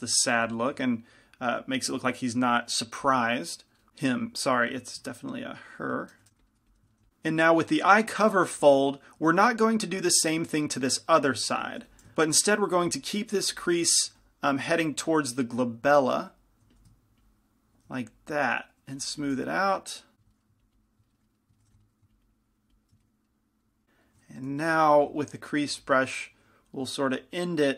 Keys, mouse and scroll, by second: 0.6 f, 6.4 shift+c, 6.4 f, 6.7 f, 7.1 f, 11.5 middle click, 12.0 ctrl+z, 13.0 f, 13.7 f, 14.3 f, 15.3-21.5 drag, 16.9 f, 19.7-22.8 middle drag, 21.8 f, 21.9-23.6 drag, 24.9 shift+c, 24.9 shift+f, 26.0 f, 26.5 f, 27.4-27.7 drag.